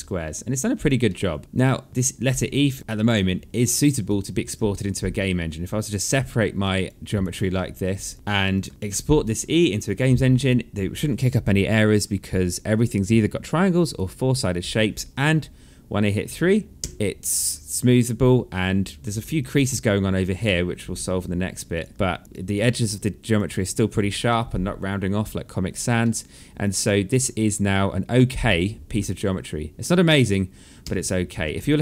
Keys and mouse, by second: 0.6 alt+middle click, 1.0 alt+click, 1.9 right click, 2.8 right click, 3.2 alt+middle click, 3.6 alt+click, 4.3 alt+middle click, 6.2 alt+click, 7.7 click, 8.3 alt+click, 8.7 alt+middle click, 9.1 alt+click, 10.9 right click, 13.5 right click, 14.1 click, 16.4 3, 16.9 click, 17.2 alt+click, 18.6 click, 18.9 alt+click, 19.9 alt+middle click, 20.5 alt+click, 21.6 alt+click, 21.9 alt+middle click, 22.2 alt+click, 22.3 alt+middle click, 22.9 alt+click, 23.8 alt+middle click, 25.6 alt+middle click, 26.2 alt+click, 26.9 alt+click, 28.7 alt+middle click, 29.7 alt+middle click, 30.4 1, 31.7 3.